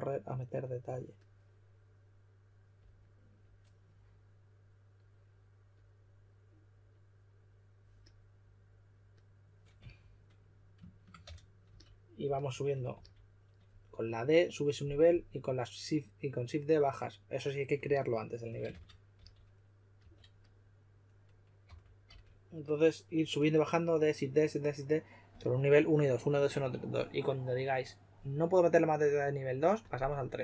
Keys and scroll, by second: 9.7 s, 11.2 d, 12.9 s, 18.6-20.4 typing, 21.6-22.0 typing.